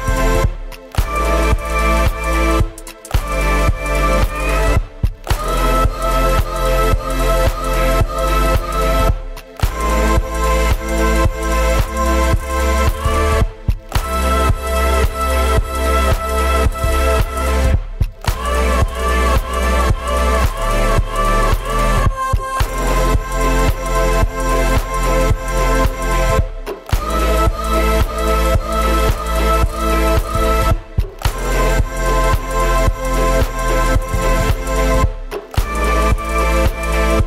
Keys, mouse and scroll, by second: 0.0 click, 0.5-2.7 right drag, 2.7 middle drag, 2.9-3.2 scroll up 4, 3.2 right click, 3.5 f, 3.7 shift+middle click, 3.9 scroll up 2, 4.0 middle click, 4.2 scroll down 1, 4.4 shift+a, 5.0 s, 8.0 g, 10.0 s, 13.0 s, 13.5 g, 14.0 scroll up 2, 14.3 shift+middle click, 14.5 Tab, 14.7 right click, 15.0 i, 16.0 middle click, 16.3 shift+right click, 16.4 middle click, 16.7 shift+right click, 16.8 s, 17.6 alt+e, 18.9 right click, 19.1 e, 21.6-23.9 drag, 23.9 Tab, 24.7 click, 26.0 right click, 27.8 h, 28.4 alt+h, 28.6 g, 30.4 shift+d, 30.8-32.0 drag, 32.0 e, 33.5 Tab, 34.3-35.1 right drag, 35.1 shift+a, 36.2 right click, 36.3 s, 36.6 right click, 36.7 s.